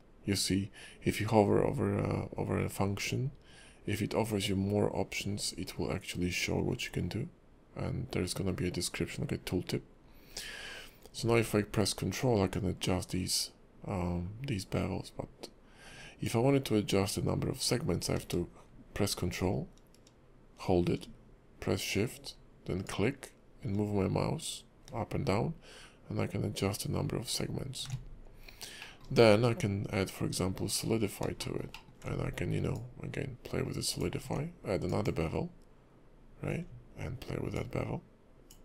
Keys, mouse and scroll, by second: 10.4 scroll up 2, 10.7-11.2 scroll down 2, 12.5 ctrl+click, 22.8 ctrl+shift+click, 28.4-28.8 scroll down 2, 28.8 middle click, 29.2-30.7 scroll up 2, 30.7 click, 31.4 shift+middle click, 31.7 middle click, 32.7 ctrl+click, 34.9 click, 37.5 ctrl+click.